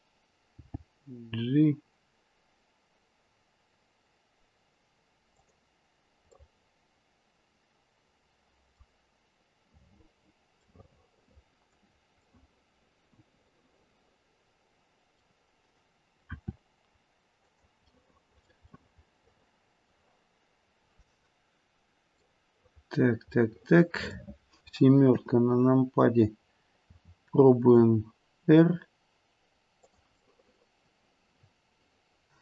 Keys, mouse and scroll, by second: 0.5 g, 6.3 middle click, 10.7 middle click, 11.2 middle click, 11.5 middle click, 12.2 middle click, 12.7 middle click, 16.3 r, 18.1 middle click, 18.3 middle click, 18.6 middle click, 21.1-21.7 scroll down 1, 22.2 middle click, 23.9 middle click, 25.1 KP_7, 26.8 r, 30.2 middle click, 30.3 middle click, 30.5 middle click.